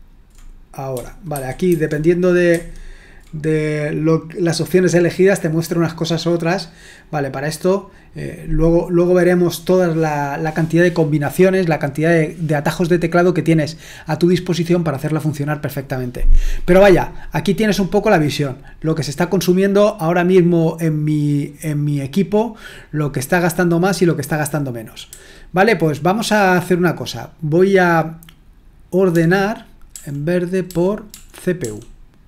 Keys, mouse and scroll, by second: 1.3 ctrl+1, 1.7 ctrl+2, 25.1 j, 29.9-31.6 typing.